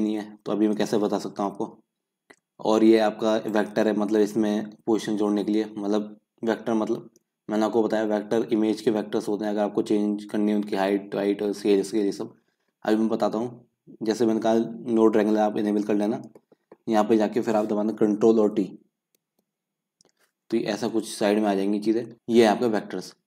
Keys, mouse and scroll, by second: 19.4 ctrl+t, 20.9-22.1 middle drag, 22.1 n.